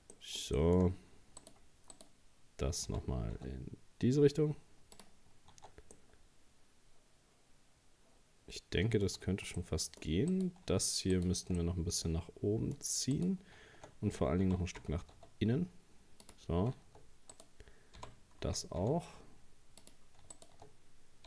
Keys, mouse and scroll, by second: 0.1 middle click, 0.9 scroll up 1, 1.4 right click, 1.9 right click, 2.9 g, 5.5 Tab, 6.0-9.1 middle drag, 9.2 Tab, 9.6 middle click, 10.3 right click, 11.1 shift+right click, 11.6-13.2 middle drag, 13.2 right click, 14.5 g, 17.3 right click, 18.0 g, 20.4 shift+right click.